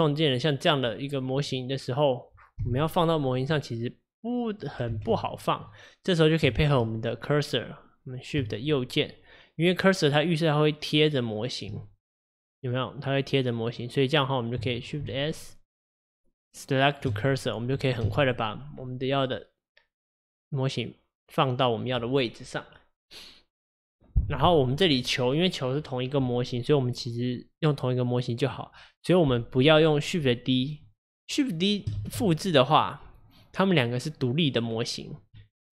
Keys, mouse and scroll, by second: 0.4-1.0 scroll down 1, 1.0 middle click, 1.5 click, 1.8-2.7 scroll down 2, 2.7 g, 3.6-5.0 middle drag, 5.0 ctrl+z, 5.3-5.7 scroll down 2, 5.7-8.8 middle drag, 8.8-11.7 shift+right drag, 11.9-14.9 middle drag, 15.1 shift+s, 18.9-20.0 scroll up 5, 32.0 shift+d, 35.4 Tab.